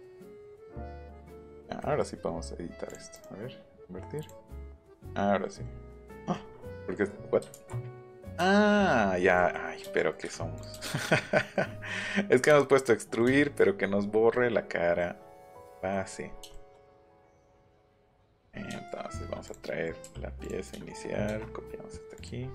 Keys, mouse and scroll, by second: 1.4 click, 1.8 middle click, 2.9 right click, 4.2 right click, 4.6 middle click, 5.7 middle click, 6.0 middle click, 6.5 middle click, 7.5 ctrl+z, 10.5 click, 13.4 shift+middle click, 14.3 middle click, 17.4 click, 17.6 click, 17.8 shift+scroll up 1, 18.0-18.6 scroll down 2, 18.7 shift+middle click, 19.0 scroll up 1, 19.4 click, 20.4 click, 21.1 middle click, 22.1 click.